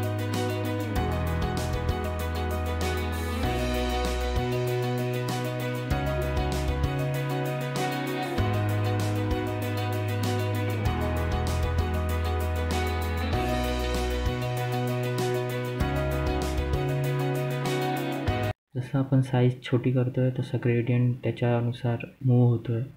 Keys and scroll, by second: 2.1 g.